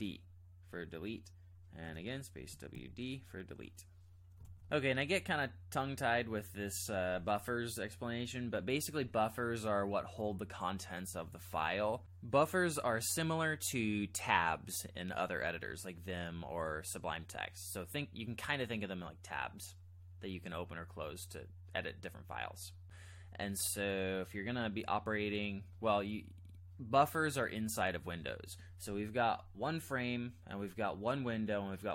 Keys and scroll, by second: 1.8 space, 2.3 w, 2.7 d, 4.5 alt+Tab.